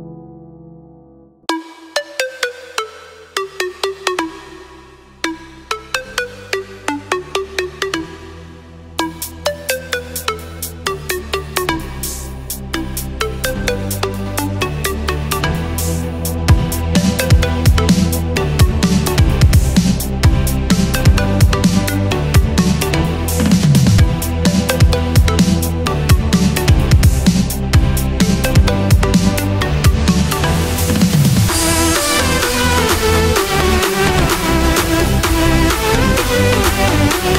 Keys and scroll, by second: 1.7 super+z.